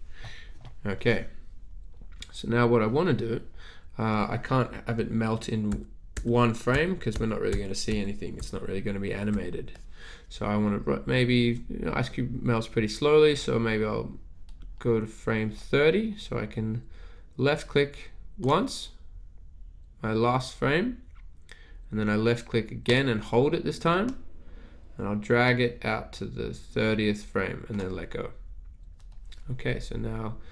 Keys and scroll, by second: 5.9-9.3 typing.